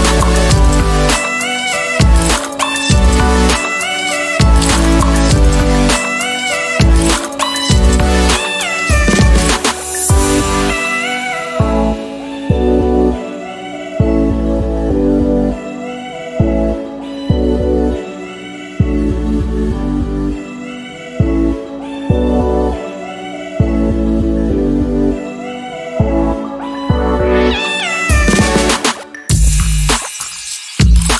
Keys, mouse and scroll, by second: 1.9 click, 3.8 click, 4.7 click, 5.7 click, 6.4 click, 7.4 click, 8.2 click, 10.3 click, 11.1 click, 12.0 click, 12.9 middle click, 14.9 ctrl+click, 15.6 ctrl+click, 17.3-18.6 ctrl+drag, 19.1 ctrl+click, 20.2 ctrl+d, 21.4 ctrl+d, 23.0-24.6 ctrl+drag, 24.9 ctrl+shift+click, 25.8 ctrl+shift+KP_Subtract, 27.2-30.0 ctrl+drag, 30.7 click.